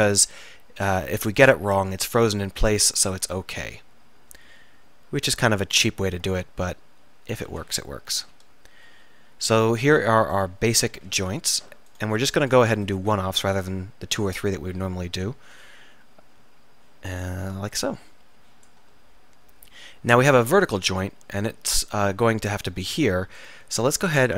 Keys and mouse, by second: 3.8-6.5 middle drag, 8.3 middle click, 10.1-13.9 middle drag, 14.4 middle click, 16.5 s, 17.9-19.1 right drag, 19.1 click, 23.5 middle click.